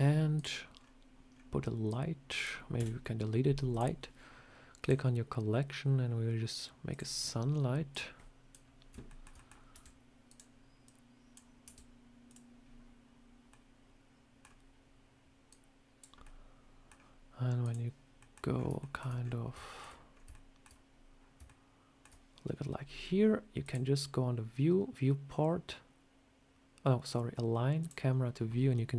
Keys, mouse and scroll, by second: 0.2 click, 0.6-1.3 scroll down 6, 1.7 click, 2.6 Delete, 3.6 click, 4.7 click, 7.1 scroll up 2, 7.8 click, 8.9 shift+middle click, 9.2 middle click, 9.6 r, 10.7 click, 11.5 r, 13.4 middle click, 14.3 scroll down 2, 15.4 click, 16.1 middle click, 17.5 click, 18.1 middle click, 18.4 scroll down 1, 18.5 scroll up 2, 18.7 shift+middle click, 19.1 scroll up 4, 19.4 shift+middle click, 20.0 scroll up 2, 20.2 shift+middle click, 20.9 scroll down 1, 21.3 shift+middle click, 23.5 click.